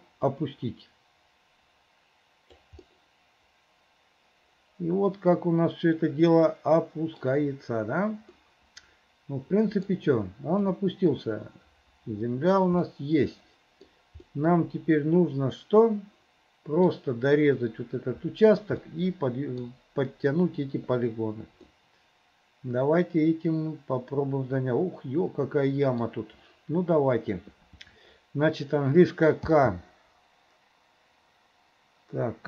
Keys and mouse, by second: 0.3-2.8 right drag, 2.9-4.6 middle drag, 5.9-8.6 middle drag, 10.0 middle click, 10.8-12.8 drag, 13.0-14.0 middle drag, 14.4-15.8 middle drag, 16.9 middle click, 18.9 middle click, 21.8-26.1 middle drag, 29.5 k.